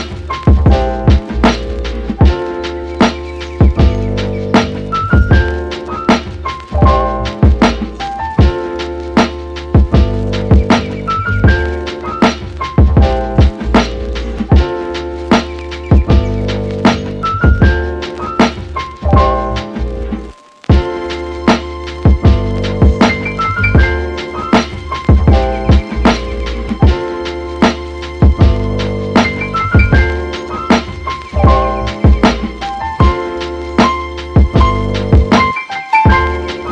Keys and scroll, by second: 30.1 super+z.